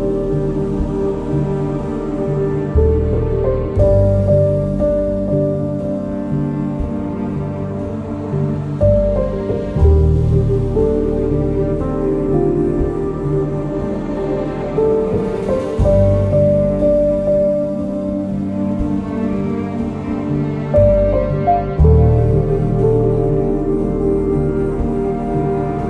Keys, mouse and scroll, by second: 0.4 scroll down 1, 0.6 shift+right click, 1.3-5.0 drag, 5.1 click, 5.8 ctrl+s, 7.4-8.8 drag, 8.8 ctrl+z, 9.8 ctrl+z, 10.2 click, 10.5 ctrl+shift+z, 10.9-13.1 drag, 13.1-16.5 drag, 16.5 ctrl+s, 16.6 click.